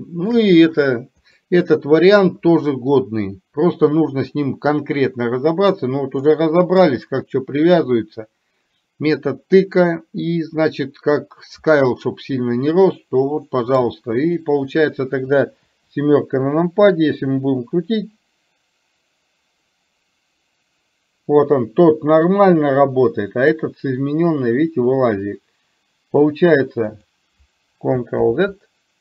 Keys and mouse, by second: 1.5-2.4 middle drag, 6.4-7.0 middle drag.